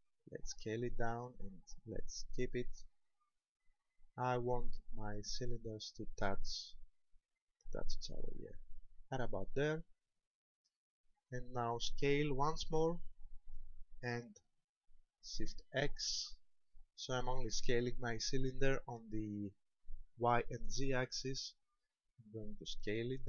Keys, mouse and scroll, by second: 8.7 shift+click, 9.5 middle click, 12.9 s.